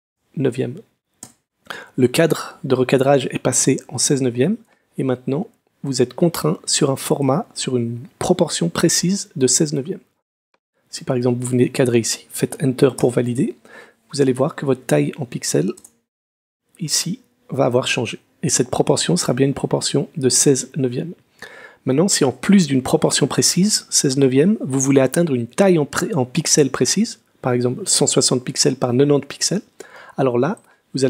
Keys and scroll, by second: 0.0-0.1 typing, 2.2 Tab, 13.0 Return, 15.8 Return.